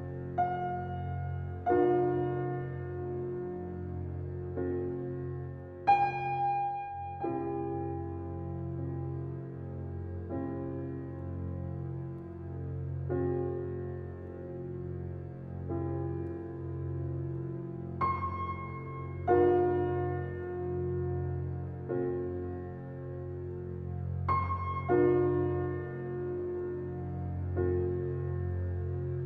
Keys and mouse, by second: 1.2 click, 1.9 BackSpace, 3.9 shift+a, 5.7 g, 7.5 s, 10.5 click, 12.1 s, 12.1 e, 13.1 Tab, 13.6 e, 15.2 e, 16.5 e, 18.0 f, 19.0 click, 19.5 2, 20.0 click, 20.7 shift+click, 21.5 shift+click, 21.8 g, 23.9 click, 24.6 shift+click, 25.0 g, 28.0 3, 28.2 click, 28.8 g.